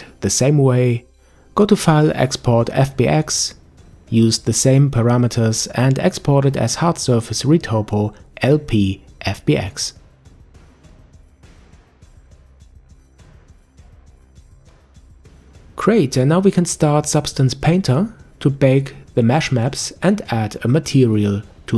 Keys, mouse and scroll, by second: 0.8-3.8 drag, 14.2 ctrl+s.